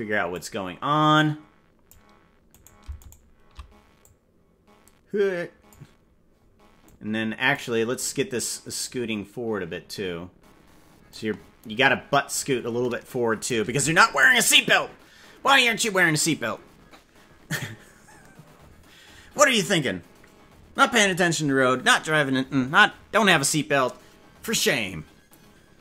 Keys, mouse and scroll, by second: 1.1 click, 2.6 right click, 4.0-5.7 drag, 6.8 click, 8.8-11.1 drag, 12.3-13.5 drag.